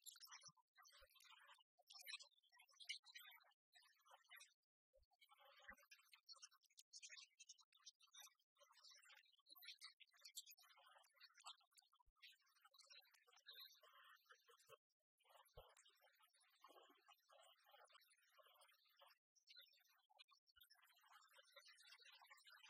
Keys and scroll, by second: 2.3 alt+Right, 5.0 alt+Right, 6.4 alt+Right, 7.4 alt+Right.